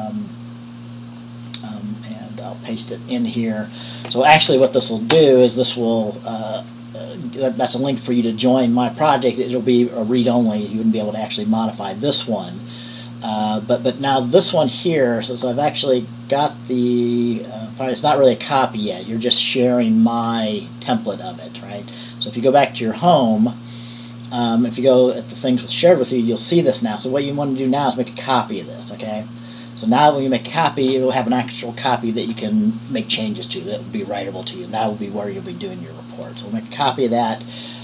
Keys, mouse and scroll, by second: 2.6-4.7 drag, 4.7 ctrl+v, 5.5 Return, 22.6 click, 25.2 click, 36.4 click.